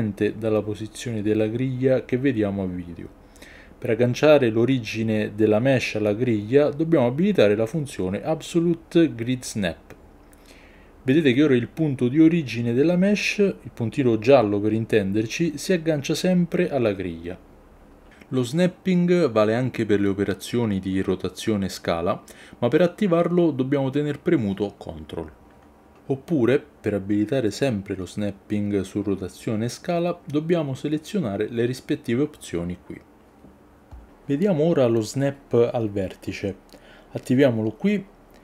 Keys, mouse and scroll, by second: 4.1-6.8 drag, 7.8 g, 15.7 click, 17.8 s, 20.5 click, 21.0 ctrl+z, 21.8 r, 24.8 ctrl+click, 25.3 ctrl+z, 30.0-33.7 drag.